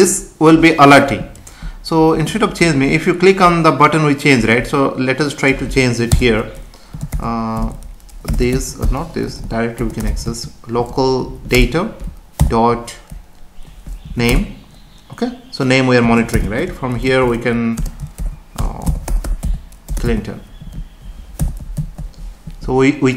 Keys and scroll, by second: 6.1 BackSpace, 11.1 Up, 11.6 Return, 14.0 Down, 14.3 Return, 16.0 space, 17.8 BackSpace, 20.6 Right, 21.8 ctrl+s.